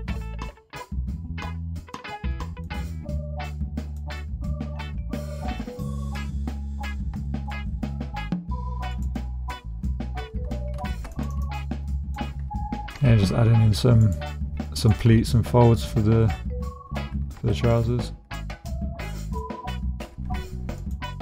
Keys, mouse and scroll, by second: 1.8 click, 2.5 middle click, 2.8 g, 3.8 click, 5.4-6.9 middle drag, 7.3 shift+middle click, 7.7 middle click, 9.0 middle click, 10.8 ctrl+r, 11.3 click, 11.9 click, 12.9 g, 14.0 click, 14.7 click, 15.1 g, 15.8 click, 17.5 shift+click, 19.2 middle click, 19.4 click, 20.0 g, 20.8 click.